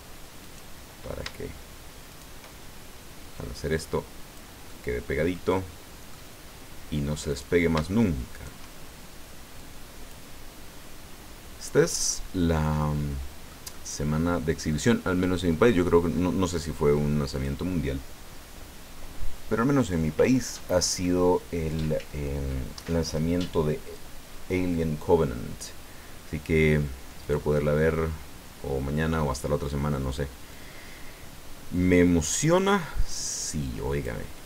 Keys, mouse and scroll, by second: 0.4 right click, 2.1 shift+right click, 3.7 click, 4.7-6.2 middle drag, 6.4 scroll up 1, 7.3 right click, 8.3 shift+right click, 9.5 click, 11.6-12.1 scroll down 1, 12.1-13.7 middle drag, 15.4-15.8 scroll up 1, 15.9 scroll down 1, 17.3 click, 27.2 right click, 27.6-29.5 middle drag, 30.5-34.2 drag.